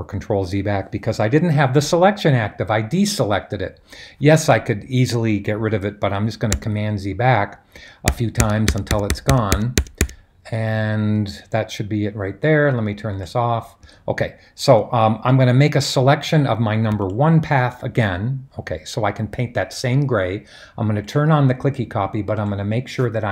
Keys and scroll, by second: 6.5 super+z, 8.1 super+z, 8.3 super+z, 8.6 super+z, 8.9-9.7 typing.